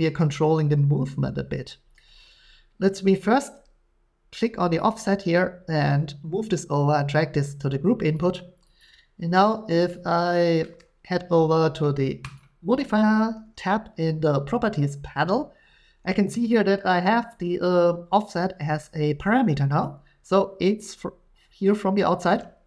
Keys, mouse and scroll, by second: 2.0 middle click, 8.1 click, 8.8 click, 12.4 click, 19.8 shift+click, 22.3 shift+click.